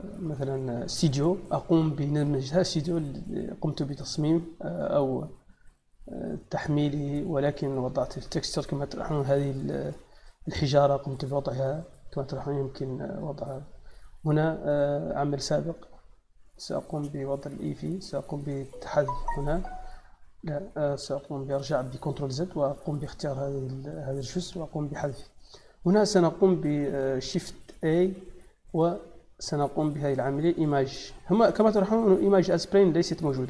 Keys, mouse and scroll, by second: 0.7 middle click, 1.6-3.3 middle drag, 5.7 scroll up 1, 6.2-6.5 scroll down 1, 6.7 middle click, 8.9 middle click, 9.8 middle click, 11.0 click, 12.2 g, 13.6 middle click, 14.1 click, 16.3 click, 18.0 click, 19.0 x, 19.4 click, 20.9 ctrl+z, 22.2 click, 24.4 x, 24.8 click, 25.6 click, 27.6 shift+a.